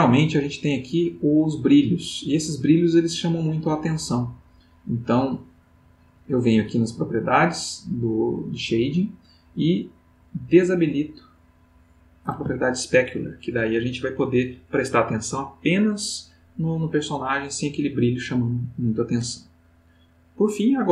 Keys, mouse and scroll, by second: 5.6 click, 11.5 click.